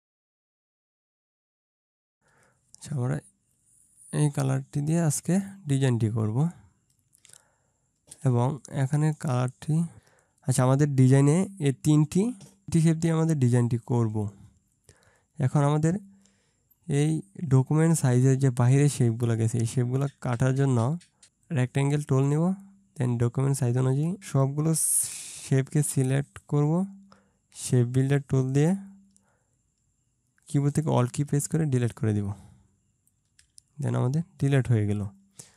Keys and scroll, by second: 0.3 Return, 1.9 Return, 3.9 ctrl+space.